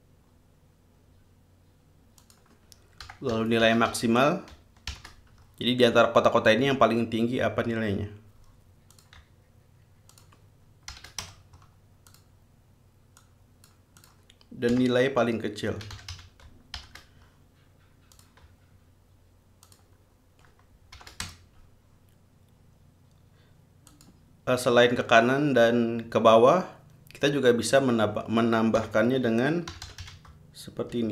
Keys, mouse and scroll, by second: 2.4 click, 3.0-5.1 typing, 9.1 click, 10.3 shift+click, 11.1 shift+0, 11.4 shift+Return, 12.3 click, 13.4 click, 14.2 click, 14.9-16.8 typing, 18.3 click, 19.8 shift+click, 21.1 shift+0, 21.4 shift+Return, 24.1 click, 28.9-31.1 typing.